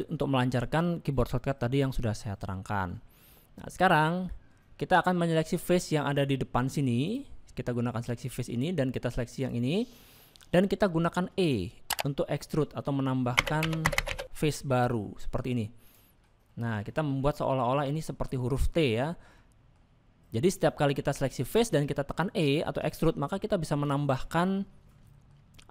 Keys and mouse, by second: 2.9-4.0 middle drag, 5.8 click, 9.4 click, 10.0 middle click, 11.1 shift+middle click, 13.4 e, 16.5-17.8 middle drag, 19.3 middle click, 21.4 click, 21.9 shift+middle click, 25.1 shift+middle click.